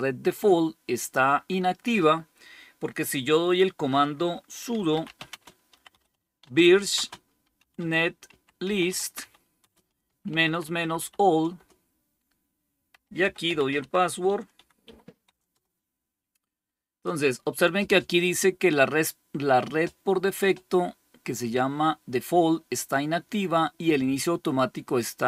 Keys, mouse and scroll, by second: 4.4-11.4 typing, 11.4 Return, 12.6-15.9 typing, 24.7-25.2 drag.